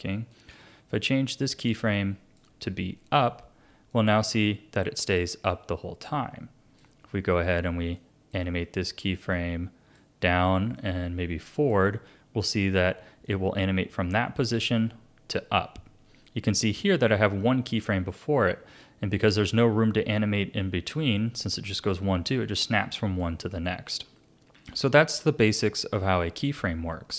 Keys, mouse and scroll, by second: 0.3 click, 3.9-6.9 drag, 8.0 click, 9.3 click, 10.8 click, 13.2-16.2 drag, 23.8 ctrl+z, 24.6 ctrl+z.